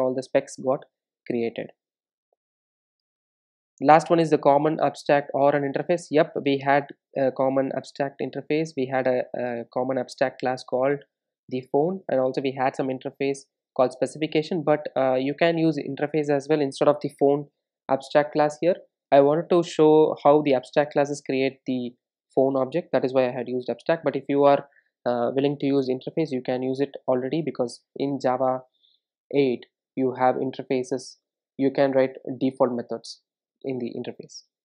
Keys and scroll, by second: 2.1 super+e, 34.3 super+e.